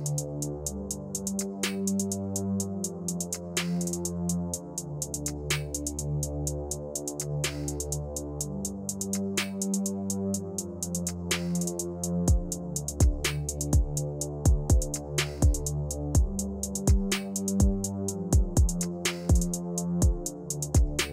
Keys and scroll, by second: 16.6 c, 20.2 ctrl+v.